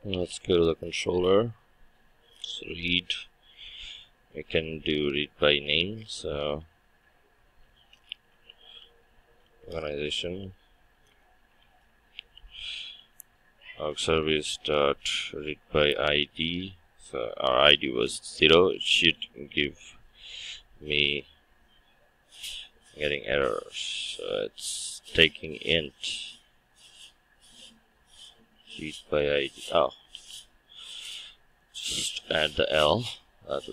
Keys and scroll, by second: 9.4 Return, 30.1 ctrl+Tab.